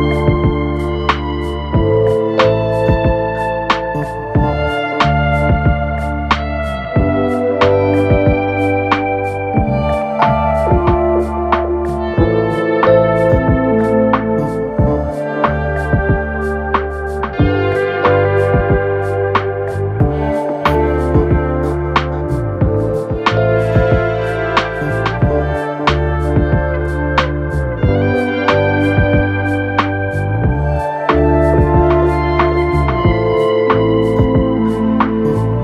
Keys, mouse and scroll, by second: 27.2 Up, 27.4 Up, 27.6 Up, 28.8 alt+click.